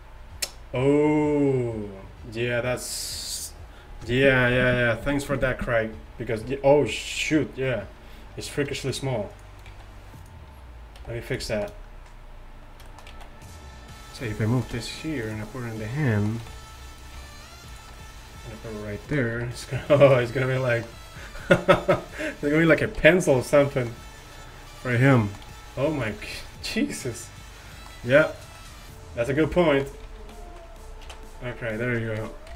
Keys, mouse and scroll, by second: 9.8 z, 11.1 g, 16.5 r, 17.3 r, 20.0 r, 23.2 r, 25.6 g, 29.2 x, 30.3 ctrl+z, 30.3 g, 30.4 ctrl+z, 31.1 alt+r.